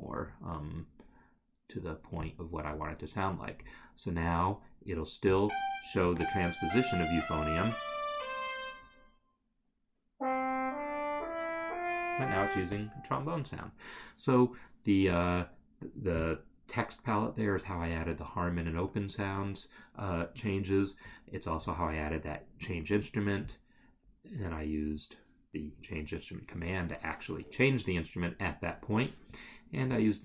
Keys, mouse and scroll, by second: 2.3 click, 3.7 scroll, 21.3 scroll, 30.0 click.